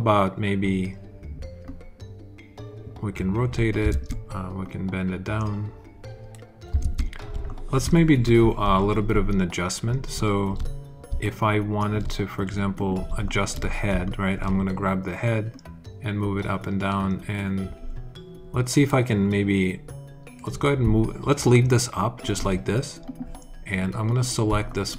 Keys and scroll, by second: 3.8 super+z, 6.7 super+z, 7.2 alt+super+z.